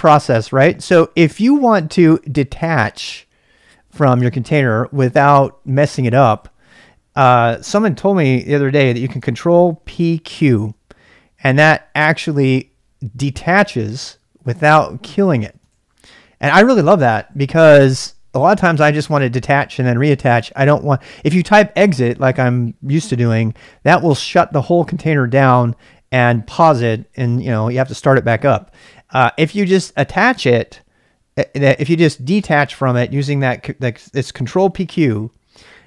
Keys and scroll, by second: 9.9 ctrl+p, 10.3 ctrl+q, 14.8-16.2 typing.